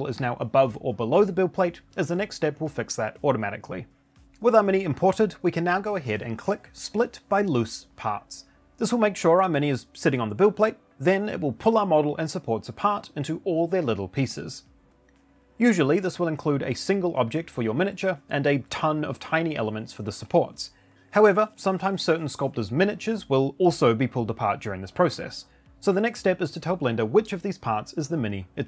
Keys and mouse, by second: 4.1 middle click, 4.5-4.8 shift+middle drag, 5.0 click, 6.7 click, 16.8 click, 21.1 click, 21.9 click, 22.6 click, 23.5 click, 24.3 click, 25.6 click, 26.3 shift+click, 26.8 shift+click, 27.3 shift+click, 28.1-28.6 shift+drag.